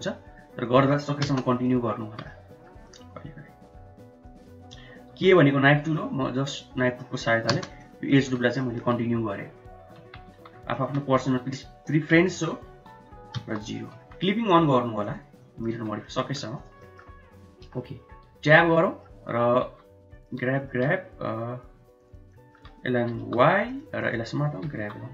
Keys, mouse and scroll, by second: 1.8 middle click, 2.1 1, 2.4 middle click, 3.0 middle click, 5.2 k, 7.9 middle click, 8.3 Tab, 8.7 middle click, 9.1 Tab, 10.1 Tab, 10.4 2, 10.8 alt+click, 11.3 s, 14.0 Tab, 15.1 click, 15.5 middle click, 15.9 Tab, 16.2 middle click, 16.6 click, 17.0 middle click, 17.7 KP_7, 18.4 Tab, 18.9 click, 19.7 1, 20.3 click, 22.4 shift+click, 23.2 g, 24.1 click, 24.6 g.